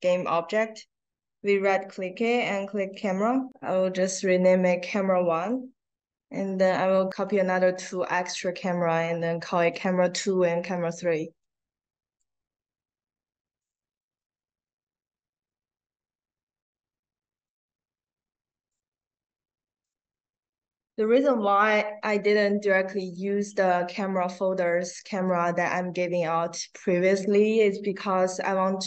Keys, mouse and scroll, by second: 2.7 click, 5.3 click, 5.9-7.3 ctrl+drag, 7.6 right click, 9.6 click, 10.5 click, 11.4 click, 13.0 click, 13.5 click, 13.8 right click, 16.5 click, 17.3 click, 18.1-19.9 drag, 22.9 click.